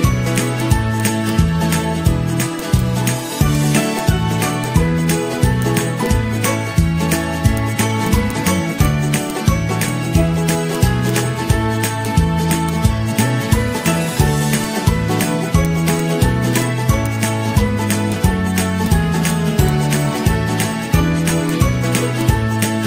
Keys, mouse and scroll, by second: 1.8 Up, 2.7 Up, 3.0 Up, 3.2 Up, 11.6 i, 13.5 Down, 13.6 Down, 13.7 Down, 19.9-20.3 Down, 20.6 ctrl+-, 22.0 z.